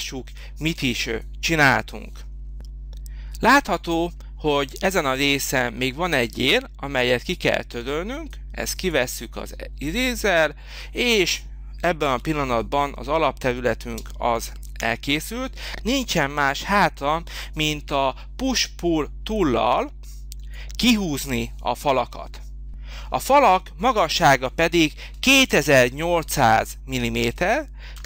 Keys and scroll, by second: 12.1 h, 13.8 space, 20.2 h, 27.9 p.